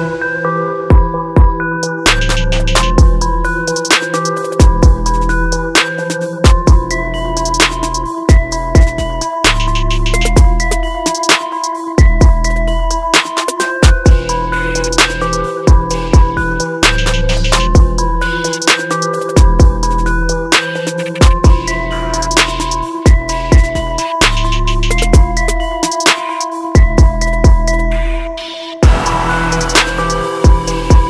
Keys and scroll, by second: 4.3 ctrl+t, 7.8 ctrl+t, 13.3 ctrl+t, 16.6 ctrl+d, 18.0 ctrl+t, 21.6 ctrl+d, 23.5 ctrl+t, 25.1 ctrl+d, 26.5 ctrl+t.